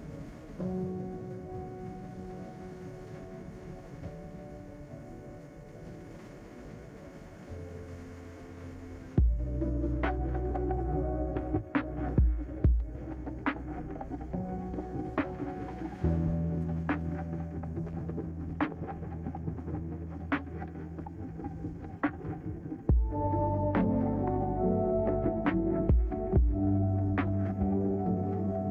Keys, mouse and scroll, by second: 7.5 3, 7.7 Return, 17.7 click, 19.0 click, 20.3 Escape.